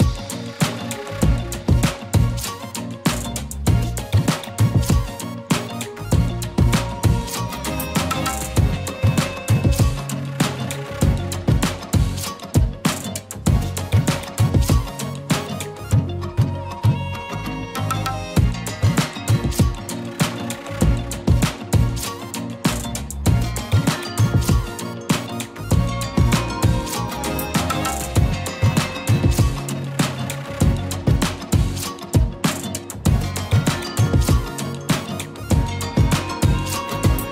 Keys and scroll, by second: 0.0-0.7 typing, 3.8 ctrl+z, 4.3 ctrl+z, 6.0 space, 7.3 e, 8.1 b, 9.5 e, 10.2 ctrl+z, 12.1 ctrl+z, 12.7 ctrl+z, 14.2 ctrl+z, 14.7 ctrl+z, 16.0 e, 32.5 ctrl+z, 35.8 e, 36.5 b.